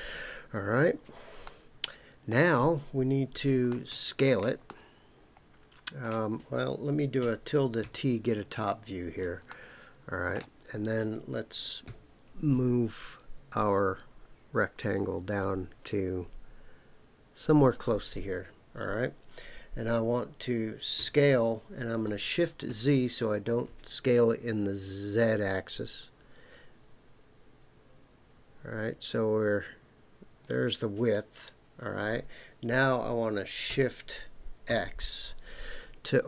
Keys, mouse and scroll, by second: 1.4-2.3 middle drag, 3.7-4.5 shift+middle drag, 4.6-6.0 middle drag, 9.5-10.4 shift+middle drag, 11.8 g, 17.6 click, 21.0 s, 22.6 shift+z, 30.4 click, 33.7 s, 34.7 x.